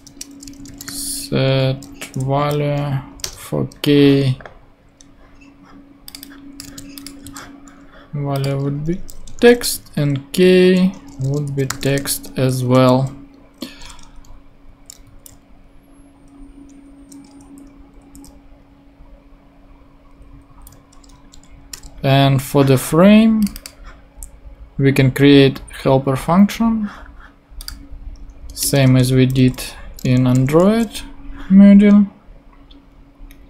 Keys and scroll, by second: 0.0-0.6 typing, 0.0 shift+Return, 1.7 shift+t, 2.3 shift+Down, 3.1 Down, 3.2 Return, 6.6 super+c, 7.2 super+v, 9.3 shift+2, 9.9 shift+', 11.0-12.2 typing, 12.7 super+;, 14.7 Down, 15.3 super+Down, 17.4 super+Left, 18.2 shift+super+Left, 20.1 shift+Down, 21.7 BackSpace, 28.6 Return, 29.4 Up.